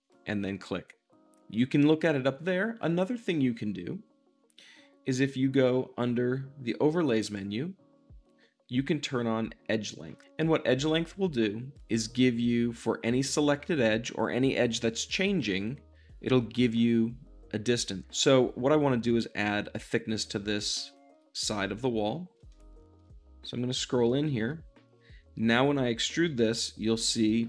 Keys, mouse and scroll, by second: 0.0-4.5 shift+drag, 7.2-20.7 drag, 21.7 middle click, 22.4-23.9 shift+middle drag, 24.0-26.2 shift+middle drag, 25.8 e.